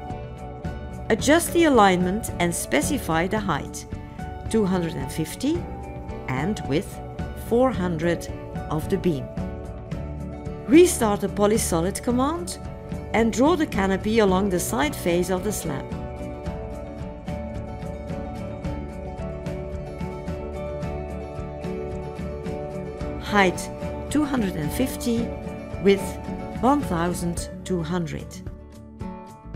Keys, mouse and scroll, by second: 18.6 ctrl+click, 22.4 ctrl+right click.